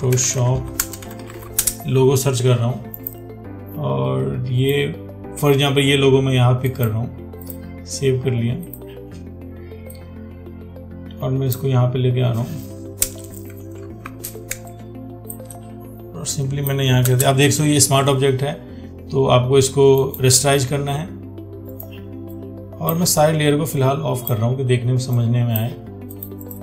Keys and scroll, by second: 14.3 ctrl+t.